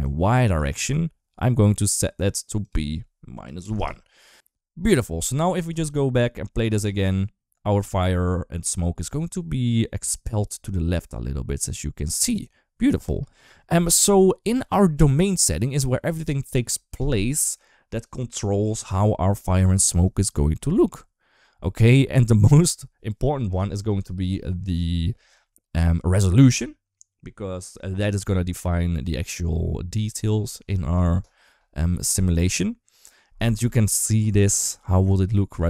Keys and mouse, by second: 0.4 d, 0.8 ctrl+z, 2.5-3.6 drag, 6.5 space, 15.0 click, 35.0 middle click.